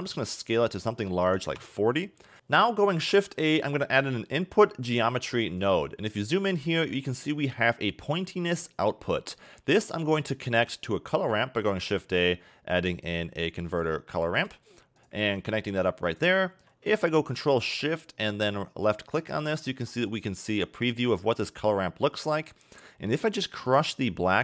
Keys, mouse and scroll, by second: 0.1 s, 2.9 shift+a, 5.9-6.3 scroll up 5, 6.3 middle click, 6.7-8.1 scroll up 8, 8.6 middle click, 9.4-9.7 scroll down 3, 9.7 middle click, 11.4 shift+a, 15.9 click, 19.9 ctrl+shift+click, 22.6-23.7 scroll up 2, 23.7 click.